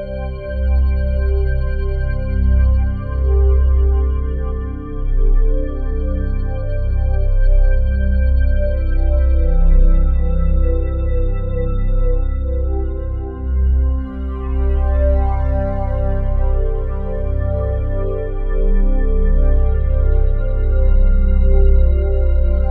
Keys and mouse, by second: 3.1-5.7 drag, 6.3-11.0 shift+drag, 12.2 click, 12.6 click, 14.3-22.7 drag.